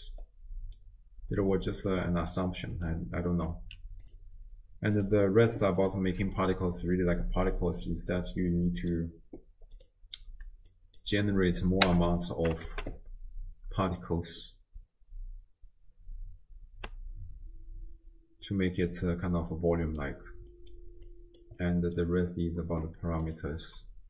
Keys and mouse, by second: 0.2 middle click, 1.3 click, 2.7 click, 4.0 click, 5.8 click, 7.9-8.9 middle drag, 9.8-12.1 drag, 12.7 shift+space, 15.0 space, 15.8 space, 16.9 space, 18.7-20.0 middle drag, 20.5 middle click, 21.1 click, 21.6 middle click, 23.3-24.0 drag.